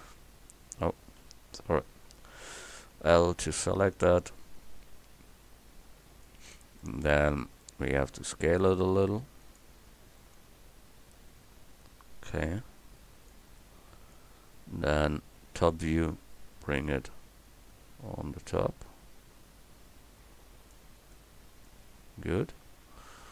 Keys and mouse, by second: 1.2 KP_1, 3.2 l, 4.4-6.3 drag, 7.3 middle click, 8.2 s, 13.9 middle click, 15.9 KP_7, 21.2 middle click, 21.4 middle click, 22.1 a.